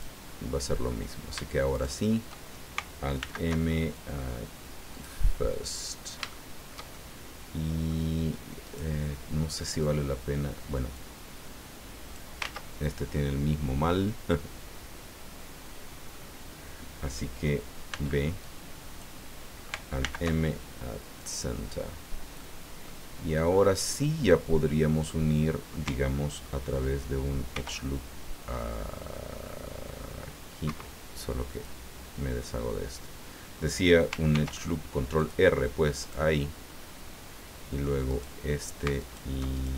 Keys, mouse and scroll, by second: 1.7 shift+right click, 3.2 alt+m, 4.9 click, 6.3-8.1 shift+middle drag, 8.6 right click, 10.9-12.4 drag, 12.4 ctrl+z, 13.1-16.3 middle drag, 17.9 b, 18.4 click, 20.0 alt+m, 21.2 click, 22.4 middle click, 24.1 scroll down 2, 27.5 ctrl+r, 30.7 Escape, 31.5 click, 34.3 ctrl+r, 35.1 click, 36.0 click, 36.7-37.4 scroll up 4, 38.1 right click, 39.0 alt+right click, 39.5 alt+right click.